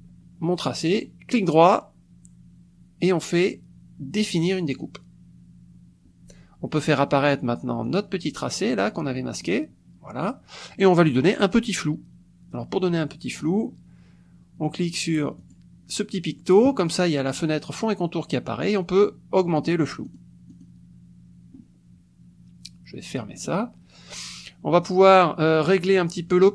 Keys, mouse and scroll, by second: 1.0 click, 4.7 click, 7.8 click, 9.4 click, 15.4 click, 19.6 click, 20.0 click, 20.5 click, 23.4 click, 25.1 click.